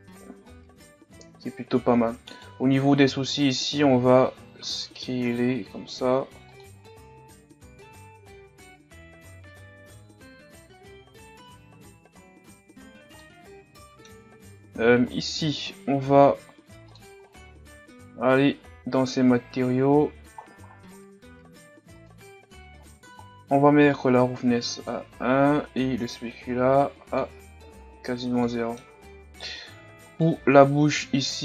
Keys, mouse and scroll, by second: 0.4-0.9 scroll up 1, 1.4 Tab, 1.9 Tab, 2.4 right click, 2.7 Tab, 3.1 a, 3.3 a, 3.9 a, 4.6 s, 6.8 scroll down 3, 7.4 scroll down 5, 7.6 Tab, 7.8 a, 8.0 scroll up 3, 8.1 Tab, 8.2 middle click, 8.6 scroll up 1, 8.6-11.8 drag, 11.8 middle click, 11.9 scroll up 1, 12.1 click, 12.5 Tab, 12.6-13.0 scroll down 6, 12.7 middle click, 13.0 scroll up 1, 13.2-15.3 middle drag, 15.3-16.9 right drag, 24.5-27.7 drag, 27.7 a, 27.9-28.5 scroll down 5, 28.5 middle click, 29.0-30.1 scroll up 6, 30.1 right click, 30.7 Tab, 30.7-31.4 scroll up 1.